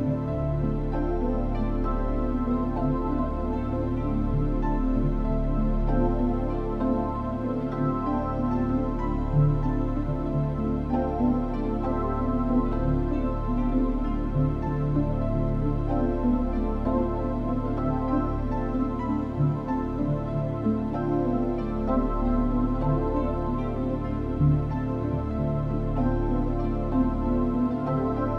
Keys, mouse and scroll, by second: 9.9 Tab, 9.9 click, 11.0 click, 11.2 click, 14.9 click, 16.3 click, 18.0 click, 21.1 click, 22.3 click, 22.6 click, 24.1 click, 26.9 l.